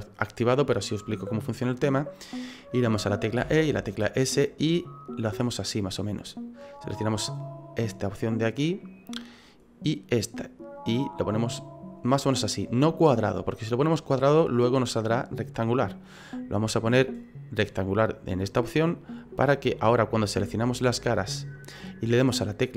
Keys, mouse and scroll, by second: 3.4 e, 7.1 click, 9.8 right click, 10.7 click, 16.6 click, 19.6 right click, 20.6 click, 21.4 right click, 21.7 middle click.